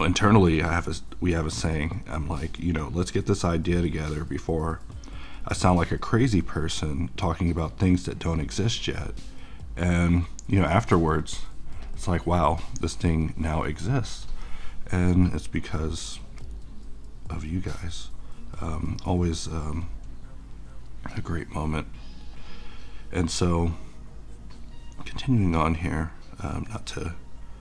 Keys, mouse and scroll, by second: 20.3-27.6 drag.